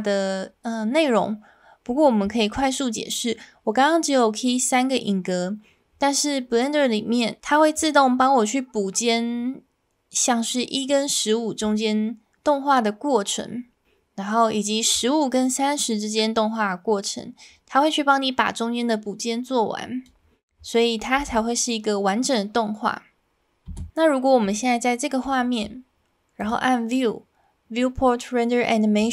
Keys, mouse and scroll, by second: 7.7-11.6 drag, 14.9-20.1 drag, 21.2 space, 23.7 space, 24.5-25.2 shift+middle drag, 26.4-29.1 drag.